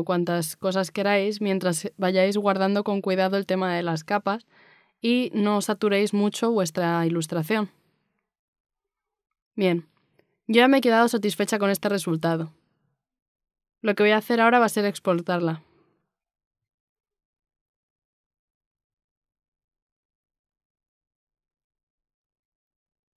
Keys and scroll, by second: 6.3 e.